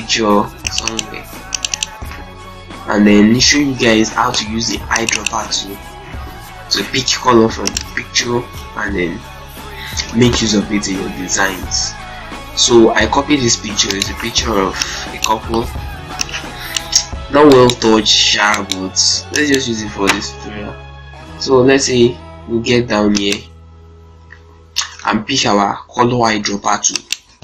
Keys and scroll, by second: 7.8 ctrl+x, 8.2 ctrl+c, 8.8 ctrl+alt+c, 9.0 ctrl+alt+Tab, 10.3 ctrl+v, 13.2 shift+z, 20.1 ctrl+space.